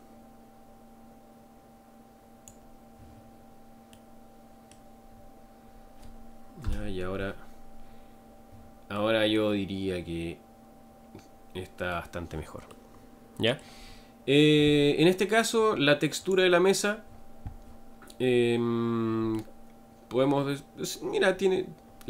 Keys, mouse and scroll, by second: 3.9-5.1 middle drag, 5.1-5.4 scroll down 4, 6.6 KP_0, 8.9-12.0 middle drag, 12.7-13.8 middle drag, 13.8-14.8 scroll down 3, 16.3 click, 19.4-21.3 middle drag, 21.3 scroll up 2.